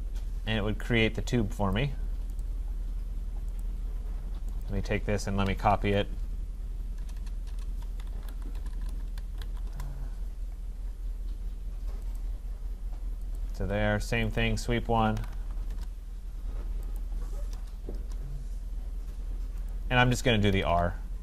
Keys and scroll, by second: 7.0 BackSpace, 9.7 Return, 13.5 Escape, 15.7 Return, 20.5 Escape.